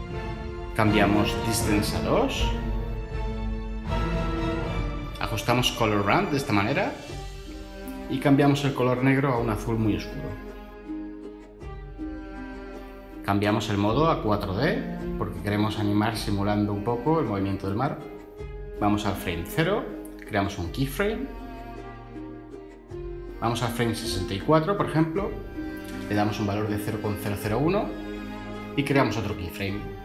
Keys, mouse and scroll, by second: 2.1 2, 2.3 Return, 26.3-27.8 typing, 28.0 Return.